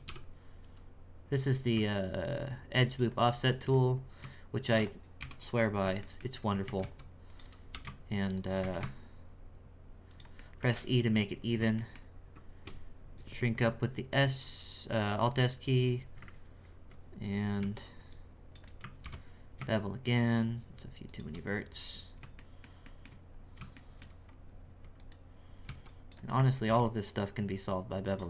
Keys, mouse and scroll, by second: 3.4 shift+middle click, 3.8-4.4 scroll up 3, 4.4 shift+scroll down 1, 5.2 KP_1, 5.5-6.0 scroll up 2, 6.0 shift+middle click, 6.4 scroll up 2, 6.7 alt+a, 6.8 c, 8.7 alt+s, 10.4-11.4 shift+middle drag, 11.4-11.7 scroll up 1, 11.7-14.8 shift+middle drag, 19.0 ctrl+r, 21.4-22.3 scroll down 9, 22.3 shift+middle click, 23.2-23.8 scroll down 3, 23.8 shift+middle click, 24.2-24.9 scroll up 2, 24.9 right click.